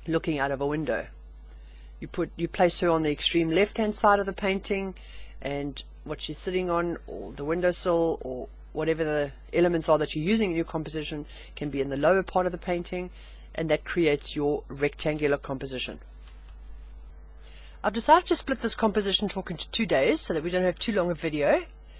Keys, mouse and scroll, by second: 4.1-5.3 middle drag, 18.0-21.9 middle drag.